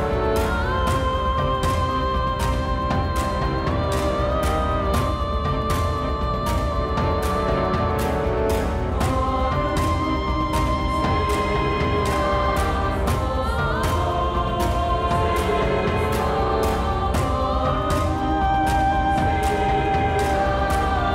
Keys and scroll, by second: 10.2 i, 17.9 i, 19.7 Tab.